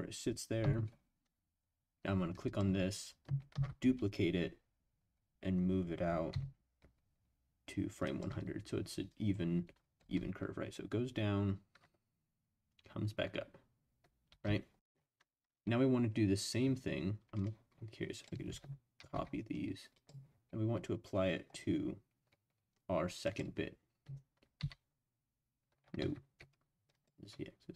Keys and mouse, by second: 0.6 i, 2.4 click, 3.5 shift+d, 6.3 x, 8.0 click, 9.1-10.1 drag, 10.0 space, 14.3 space, 17.3 click, 19.0 ctrl+c, 19.9 click, 23.2 click, 24.6 ctrl+v, 26.0 ctrl+z, 26.9 click.